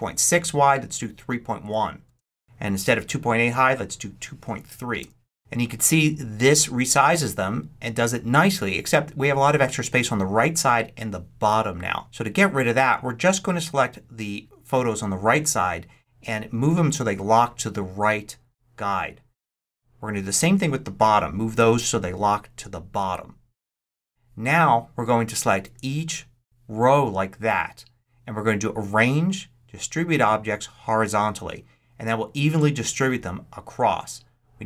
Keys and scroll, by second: 1.5 |, 1.9 Return, 4.4 3, 4.8 Return.